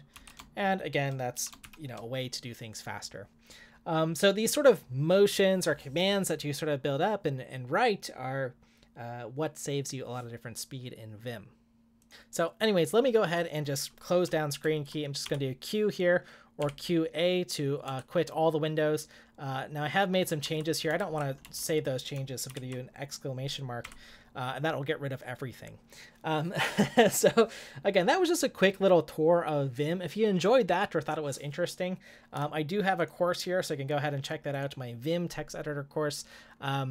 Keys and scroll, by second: 0.1 ctrl+w, 1.3 9.